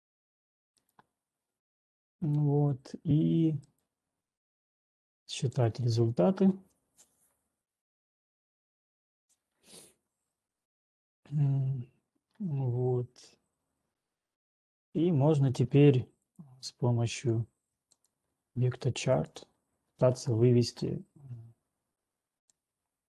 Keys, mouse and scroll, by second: 0.3 click, 1.0 right click, 1.5 right click, 15.8 click, 16.8 click, 18.3 ctrl+click, 19.3 ctrl+click.